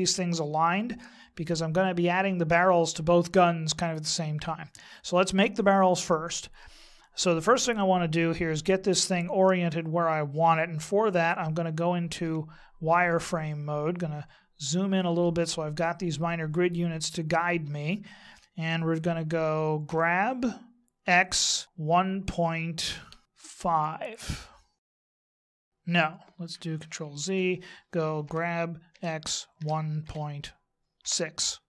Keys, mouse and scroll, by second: 12.2 z, 13.9-14.2 scroll up 1, 14.6-15.8 scroll up 1, 19.9 g, 27.0 ctrl+z, 28.2 g.